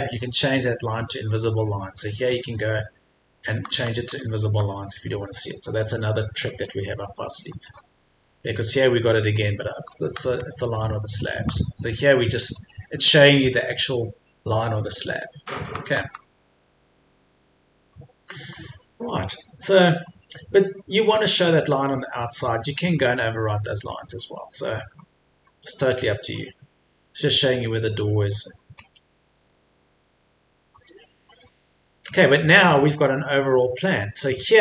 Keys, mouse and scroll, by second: 3.6 Escape, 3.9 scroll down 1, 4.1 Escape, 5.2-5.9 scroll down 1, 6.0 middle click, 6.7-7.2 scroll up 1, 7.2 middle click, 7.9-8.3 scroll up 1, 9.3-9.8 scroll down 1, 9.9 Escape, 10.1 Tab, 10.7 click, 11.3 scroll down 1, 11.5 Escape, 12.5 click, 15.7 Escape, 16.8-17.3 scroll up 1, 17.3-18.6 middle drag, 19.3-19.7 scroll up 1, 21.9-22.5 scroll down 1, 22.5-24.2 scroll up 1, 24.2-24.7 scroll down 1, 25.0 middle click, 25.9-26.2 scroll down 1, 26.2 scroll up 1, 28.8-29.2 scroll down 1, 30.1-30.7 scroll up 1, 30.7 middle click, 31.7-32.2 scroll down 1, 32.2 middle click, 33.7 scroll up 1.